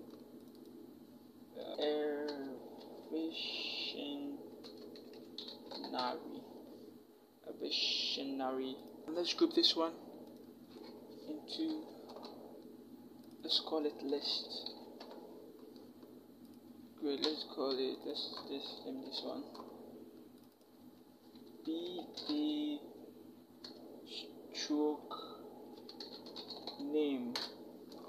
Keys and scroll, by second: 1.7-3.4 typing, 4.5-5.8 typing, 11.4 ctrl+shift+g, 14.3-14.8 typing, 18.9 ctrl+g, 21.3-22.0 typing, 23.5 space, 25.6-26.5 typing, 27.2 Return.